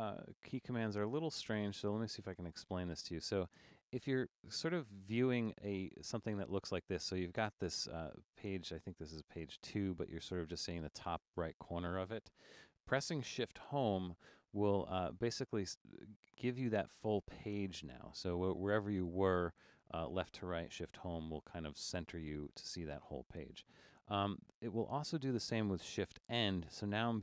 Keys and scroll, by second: 0.3 super+=, 13.8 shift+?, 21.3 shift+?.